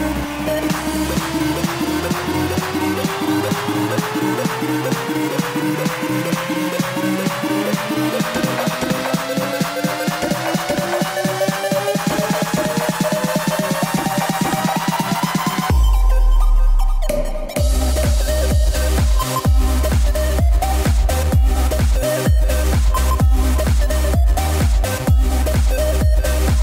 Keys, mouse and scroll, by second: 3.8 x, 6.7-9.5 drag, 9.5 r, 13.8 i, 15.5-19.3 drag, 20.4 r, 25.2 i, 26.0-26.6 drag.